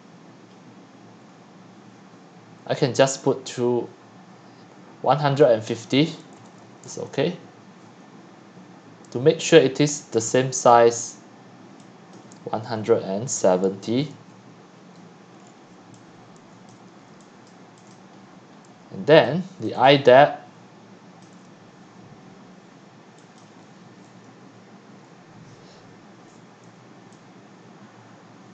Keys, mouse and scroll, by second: 0.6 click, 0.7 click, 1.2 click, 1.3 click, 5.7 click, 6.1-7.1 typing, 12.2 click, 12.8-13.8 typing, 14.1 Return, 15.3 click, 15.9-17.9 typing, 16.7 click, 17.5 click, 17.9 click, 18.2 scroll down 4, 18.3 middle click, 18.6 middle click, 18.6 middle click, 18.8 middle click, 19.2 c, 19.7 click, 19.8 click, 19.9-21.1 c, 21.2 click, 21.3 c, 21.4 c, 23.4-28.4 drag.